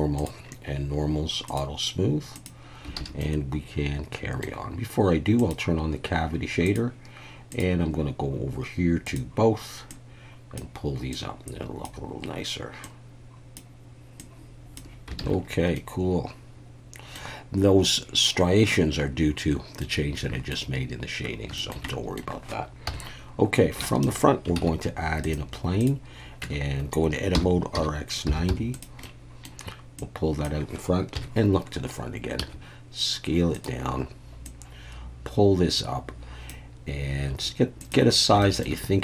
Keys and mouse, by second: 0.2 click, 1.5 click, 2.4 click, 3.0 alt+a, 3.2-4.4 middle drag, 5.4-14.9 drag, 15.2 alt+a, 15.8-17.2 middle drag, 19.8-20.5 middle drag, 21.6 shift+drag, 21.9 middle click, 22.9 KP_1, 23.8 shift+middle click, 24.6 shift+a, 26.4 Tab, 27.3 r, 27.7 x, 28.3 9, 28.5 0, 28.7 click, 29.0 middle click, 30.0 click, 31.1 KP_1, 32.4 s, 33.5 click, 34.4-36.5 drag, 37.3 s, 37.8 click, 38.4 shift+middle click.